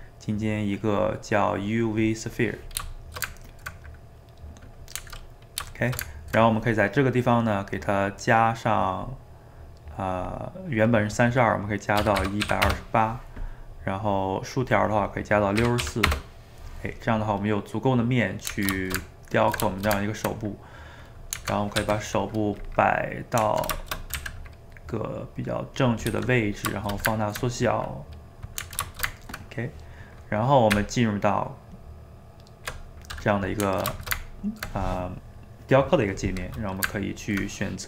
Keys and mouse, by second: 3.1-9.0 ctrl+shift+middle drag, 9.0-13.3 drag, 14.6-17.4 drag, 17.4-21.8 middle drag, 21.8 g, 22.9-24.2 middle drag, 24.2 s, 26.1 g, 26.8-30.7 shift+middle drag, 30.7 Tab, 33.4-37.8 middle drag.